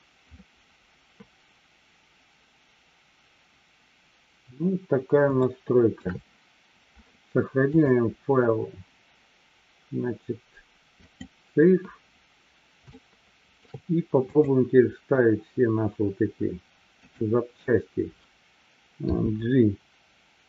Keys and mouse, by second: 5.4-6.1 shift+middle drag, 7.8-11.3 drag, 13.1-13.6 shift+middle drag, 14.4 click.